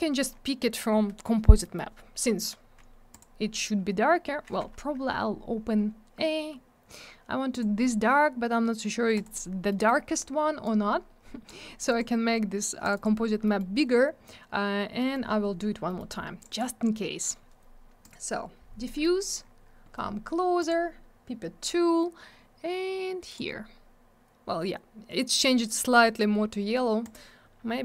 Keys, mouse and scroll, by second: 1.6 middle click, 1.7 middle click, 3.1 click, 3.1 click, 4.0-4.6 scroll up 1, 4.6 Escape, 7.5 click, 7.5 click, 9.2 click, 9.7 middle click, 9.8 middle click, 10.6 click, 11.8 click, 11.8 click, 11.8 click, 11.9 double click, 12.8 click, 12.8 click, 12.9 click, 13.0 double click, 13.4 middle click, 13.5 middle click, 14.9 middle click, 15.1 middle click, 15.2 scroll down 1, 15.8 middle click, 15.9 middle click, 16.4 click, 16.4 double click, 16.5 click, 16.5 click, 18.0 click, 18.1 click, 18.8 middle click, 19.0 middle click, 19.1 scroll up 1, 20.5 click, 20.6 click, 23.2 click, 23.3 click, 27.0 click, 27.1 click.